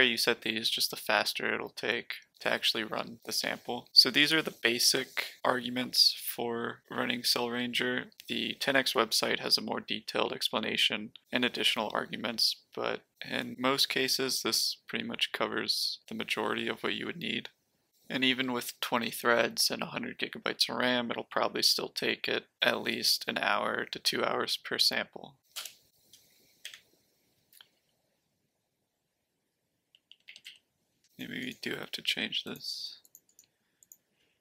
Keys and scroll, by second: 25.5 Return, 26.6 Up, 27.8 Left, 28.3 Left, 28.4-29.7 Left, 29.9 Left, 30.1 Left, 30.2 Left, 30.4 Left, 31.1 BackSpace.